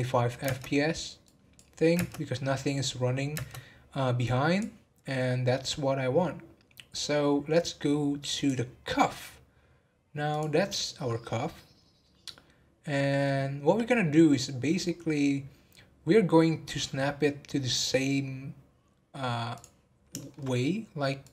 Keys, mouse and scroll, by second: 0.4 space, 1.3-1.9 drag, 1.9 space, 3.3 space, 4.2 click, 5.1-8.3 middle drag, 8.3 click, 8.8 scroll down 1, 10.3 click, 10.6-11.1 scroll down 5, 11.1-14.1 middle drag, 14.2 scroll up 3, 14.9 scroll down 1, 15.9 scroll up 1, 17.8 scroll up 5, 19.5 click, 19.9 scroll up 2, 20.1 shift+middle drag, 20.4-21.2 scroll up 1, 21.2 scroll up 2, 21.2 click.